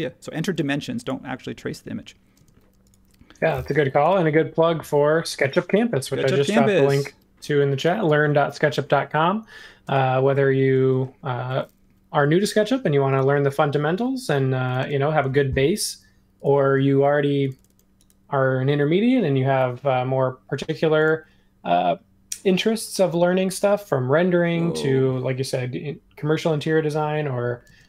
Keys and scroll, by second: 0.5 super+s, 2.3 space, 4.0 |, 7.1 ↻, 9.8 space, 12.4 r, 14.8 space, 27.0 super+z.